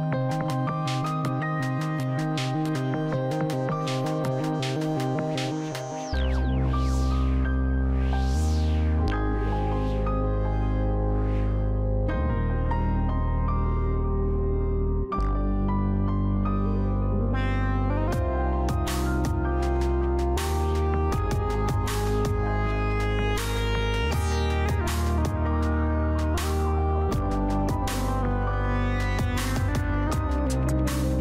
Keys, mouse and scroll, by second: 1.9-3.0 scroll up 1, 3.0-7.2 drag, 13.3 scroll up 1, 13.8-15.0 scroll down 1, 15.0 click, 15.7-19.2 middle drag, 20.6 click, 22.8 click, 25.7-28.5 scroll down 1.